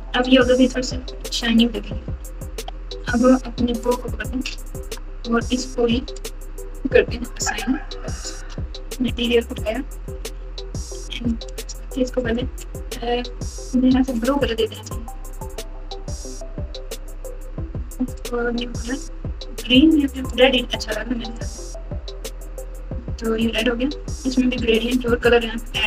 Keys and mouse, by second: 0.7-2.4 typing, 4.8 Tab, 8.3 Tab, 10.4 n, 10.9 n, 14.7 click, 17.0 click, 18.1 click.